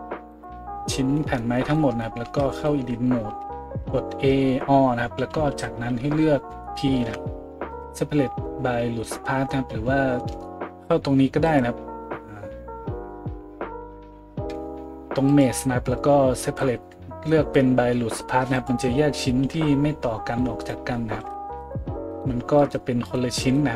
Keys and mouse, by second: 0.3 middle click, 0.3 right click, 2.2 Tab, 3.3 a, 3.8-11.4 middle drag, 5.2 a, 5.5 a, 7.0 p, 11.4-22.1 drag, 21.1 Tab, 21.6 right click, 22.2-22.6 drag, 22.7-23.0 drag, 23.1-23.7 drag, 23.4 middle click, 23.4 right click.